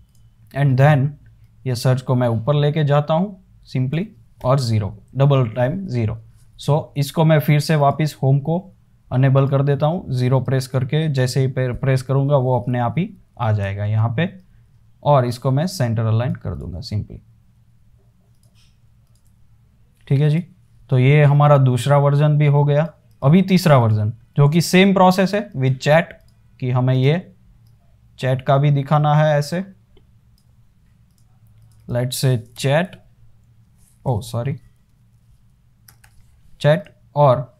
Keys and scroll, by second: 0.0-0.1 typing, 4.7 typing, 11.4 0, 14.1 super+z, 23.7 super+s, 24.6 super+d, 25.6 space, 32.4-33.5 typing, 34.7-36.8 typing.